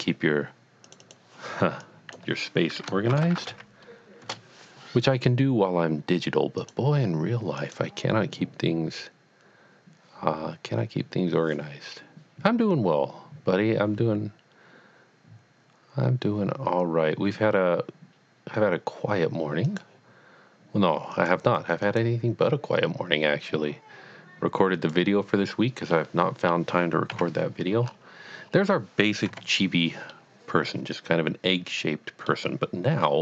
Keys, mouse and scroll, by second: 0.9 click, 1.0 double click, 1.8 click, 3.1-3.8 typing, 4.2 Return, 6.6 click, 7.6 click, 19.6 click, 19.9 click, 21.1 click, 21.8 click, 24.7 click, 25.2 click, 26.0 middle click, 26.4 middle click, 27.2 KP_1, 27.8-28.3 scroll up 1, 28.3 scroll up 1, 28.4-29.2 scroll down 1, 29.2 scroll up 1, 29.3 KP_Decimal, 30.1 middle click.